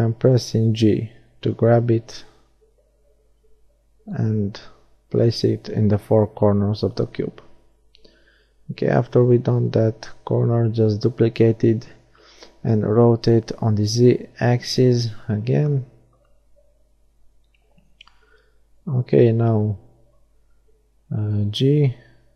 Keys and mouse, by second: 0.9 shift+d, 1.7-3.5 drag, 5.2 r, 18.1-19.9 middle drag, 20.9-22.3 drag.